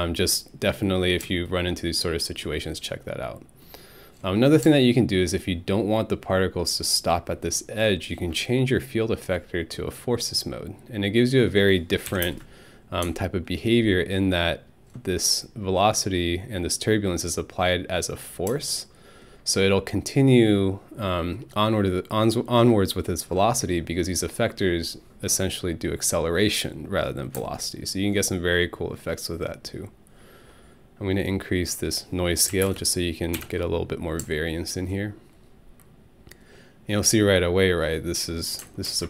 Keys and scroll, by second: 12.1 Home, 12.2 space, 32.5 5, 32.6 Return, 33.4 Home.